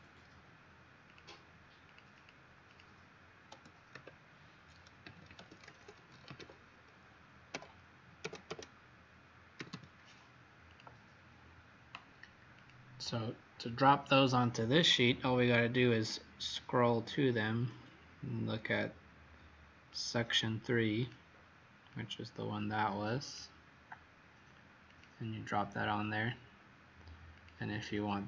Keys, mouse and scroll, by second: 1.1 click, 2.1 click, 3.9 Caps_Lock, 4.7-10.1 typing, 10.6 click.